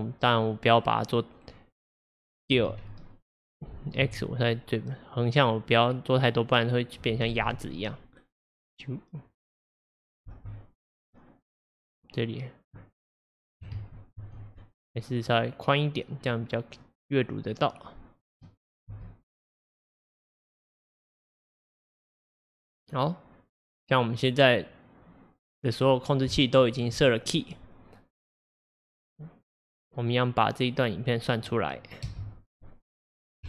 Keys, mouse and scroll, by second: 2.6 s, 7.3 space, 10.3 space, 11.0-13.8 drag, 13.8 ctrl+z, 14.2 ctrl+z, 16.3-16.6 scroll, 16.9-18.9 middle drag, 18.9 space, 25.7 scroll, 25.8-26.4 scroll down 2, 26.4-29.4 shift+middle drag, 32.1 space.